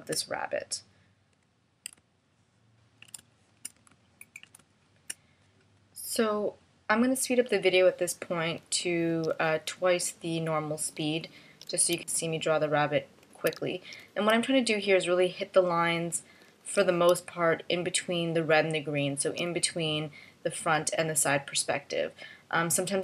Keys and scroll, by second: 4.1 space, 5.6 space, 9.8 space, 12.2 space, 13.7 space, 14.5 space, 17.3 space, 19.9 space.